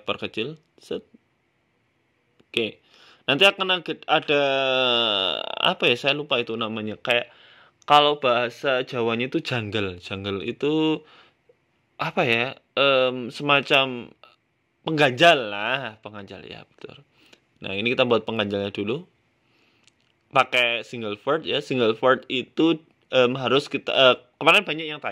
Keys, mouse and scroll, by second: 0.3 shift+middle click, 0.8 s, 2.2 middle click, 2.6-2.9 scroll down 3, 4.6 KP_7, 5.4 shift+a, 9.4 shift+s, 10.8 shift+a, 13.2 scroll up 4, 13.5 shift+middle click, 14.5 Tab, 15.4 g, 17.6 Tab, 18.3 e, 19.4 click, 19.8 e, 20.9 e, 21.6 e, 22.7 e, 24.3 a, 25.0 click.